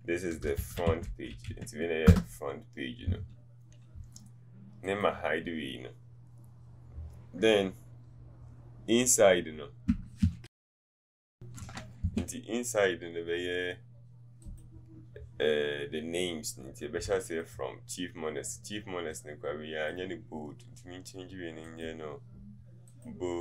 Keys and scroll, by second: 17.3 t.